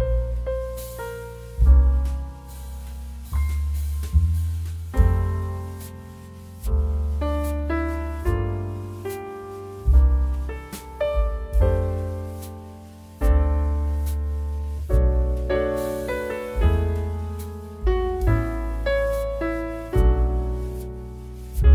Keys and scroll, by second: 7.4 Return, 16.8 Delete, 18.1 ctrl+d.